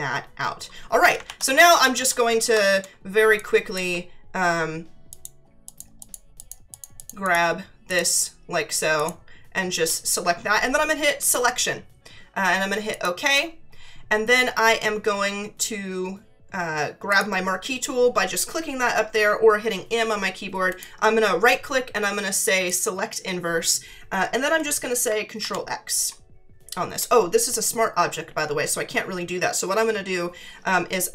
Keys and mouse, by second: 2.9 space, 3.3 click, 5.1 click, 8.9 click, 11.2 click, 12.9 click, 17.1 click, 20.7 right click, 22.7 click, 25.4 ctrl+x.